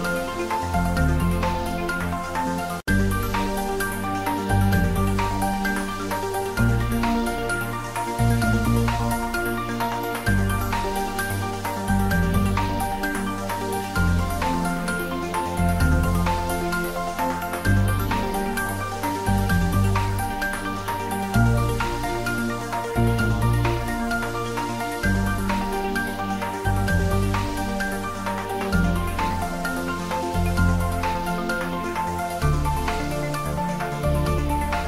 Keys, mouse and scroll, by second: 0.7 click, 0.9 ctrl+middle click, 1.5 ctrl+middle click, 2.6 ctrl+middle click, 3.4-5.3 typing, 4.5 click, 7.5 click, 8.0 s, 8.4 y, 9.0 click, 9.2 ctrl+z, 10.3 g, 10.8 click, 11.0 Tab, 11.3 ctrl+middle click, 11.7-13.6 ctrl+shift+middle drag, 13.8 2, 13.9 middle click, 14.8 click, 15.4 shift+click, 15.6 shift+middle click, 16.5 shift+click, 16.8 middle click, 17.6 shift+click, 19.0-20.4 middle drag, 20.4 shift+click, 22.1 middle click, 23.0 shift+click, 23.7-26.0 drag, 26.0 click, 26.7 middle click, 27.3 click, 27.6 Tab, 27.8 ctrl+middle click, 28.3 ctrl+middle click, 28.6 middle click, 29.2 Tab, 29.6 middle click, 30.0 Tab, 30.6 ctrl+3, 31.0 ctrl+middle click, 31.8 middle click, 33.1 Tab, 33.6 click, 34.1 shift+click, 34.5 middle click.